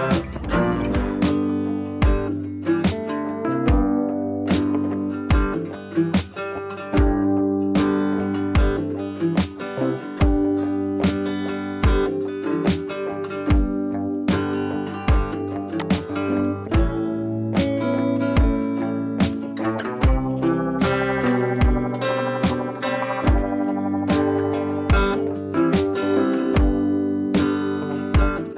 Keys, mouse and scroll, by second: 3.7-11.5 drag, 12.1-13.5 scroll down 1, 14.7 right click, 15.7 click, 16.6-19.0 scroll down 1, 22.2 shift+click, 23.0-23.3 scroll up 1, 24.3-24.7 scroll up 1, 25.6 ctrl+alt+shift+e, 27.0 scroll up 1.